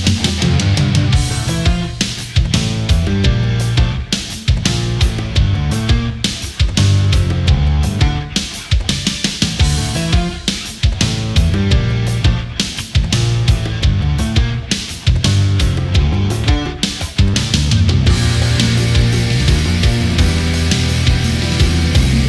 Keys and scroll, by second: 11.0 ctrl+z, 14.7 space, 17.0 ctrl+z, 17.9 ctrl+z, 18.5 ctrl+=.